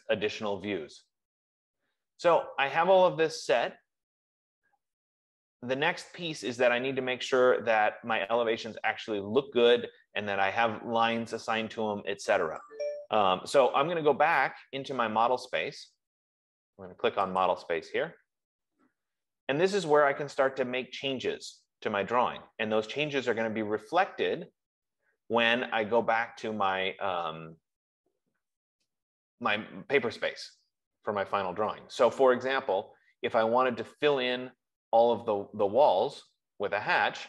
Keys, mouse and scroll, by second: 17.9 click, 21.7 scroll, 23.1-24.0 scroll, 25.0-25.9 scroll, 25.9 F15, 32.8 scroll, 34.0-35.0 scroll.